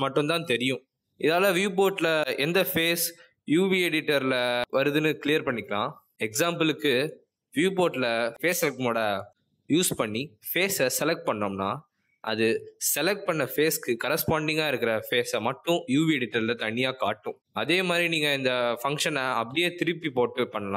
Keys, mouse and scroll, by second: 0.7 click, 1.2 shift+click, 6.4 middle click, 8.5 click, 9.4 click.